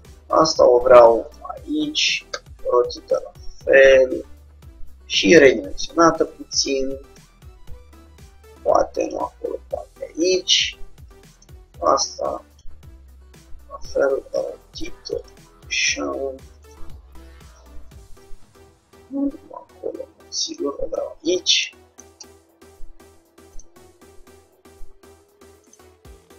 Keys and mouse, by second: 0.2 g, 2.4 r, 4.4 s, 5.5 g, 8.3 g, 11.5-13.1 drag, 11.7 g, 13.1 r, 15.9 s, 17.2 g, 21.7-25.5 middle drag, 22.4 Tab, 25.2 click, 25.7-26.3 drag.